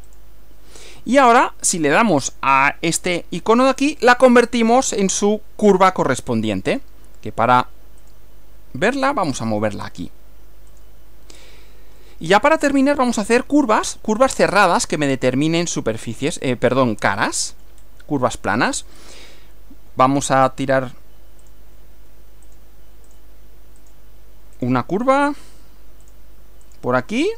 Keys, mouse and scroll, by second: 0.1 click, 1.5 click, 3.9 click, 6.7 click, 8.1 click, 9.0 click, 10.7 click, 11.4 scroll down 1, 12.0-12.7 shift+middle drag, 12.7 shift+scroll down 1, 13.3 scroll up 2, 14.4-15.9 shift+middle drag, 16.7 scroll up 2, 17.1-17.9 shift+middle drag, 17.9 shift+scroll down 2, 21.5 click, 22.5 click, 23.1 click, 23.9 click, 24.6 click, 26.1 click, 26.7 click.